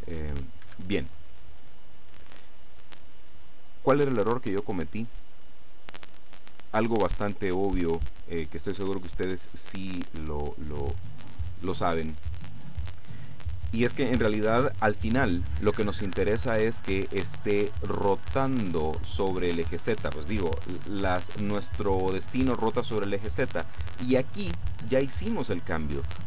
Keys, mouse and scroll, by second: 0.8 Escape, 1.5 right click.